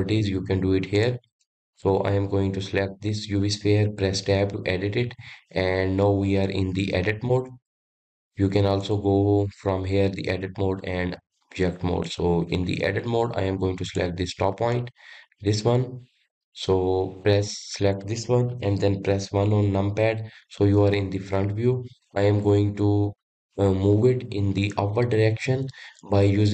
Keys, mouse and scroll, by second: 0.9 click, 1.3 click, 4.2 Tab, 8.8-12.0 drag, 13.9 click, 14.8 click, 15.3-18.0 scroll up 3, 20.5 KP_1, 21.4-23.3 scroll down 3.